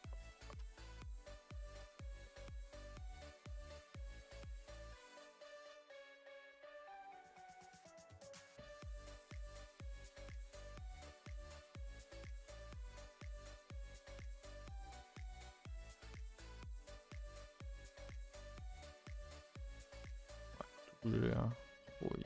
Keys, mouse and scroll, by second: 0.3 click, 0.7 shift+Left, 1.1 middle click, 1.9 f, 2.2 middle click, 2.7 Left, 3.5 f, 3.9 Left, 4.8 Left, 5.3 Left, 5.8 shift+click, 6.0 f, 6.5 middle click, 7.0 scroll up 2, 7.3-10.0 middle drag, 10.0 click, 10.4 shift+click, 10.8 f, 11.0 middle click, 11.2 a, 11.4 a, 11.5 middle click, 12.2 Left, 12.8 shift+Left, 13.2 f, 13.4 scroll down 2, 13.6-14.7 middle drag, 14.7 a, 14.8 a, 14.9-16.0 middle drag, 16.0 click, 16.4 g, 17.7 click, 18.6 middle click, 19.1 g, 20.3 1, 20.7 click, 20.9 g, 21.6 middle click, 21.9 2.